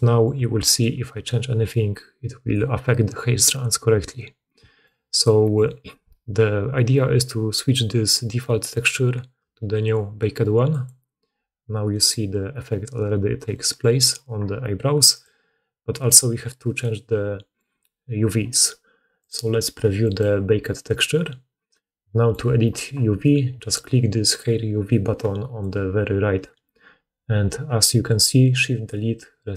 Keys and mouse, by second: 0.7-8.8 ctrl+middle drag, 8.8-15.2 drag, 15.2-16.5 middle drag, 16.5 click, 16.7 middle click, 16.8-26.6 drag, 17.0-19.3 middle drag, 17.0-19.3 right drag, 24.3-25.7 middle drag, 24.3-25.7 right drag, 26.7 click, 28.3 click.